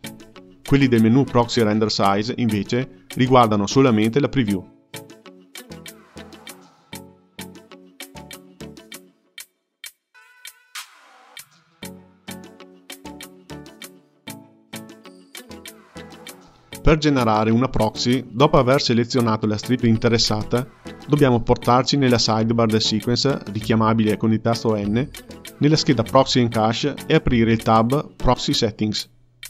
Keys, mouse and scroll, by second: 0.0-2.2 drag, 3.4-6.4 drag, 7.2-11.6 drag, 17.7 click, 19.0 click, 23.1 n, 23.6 n, 25.7 click, 28.8-29.4 drag.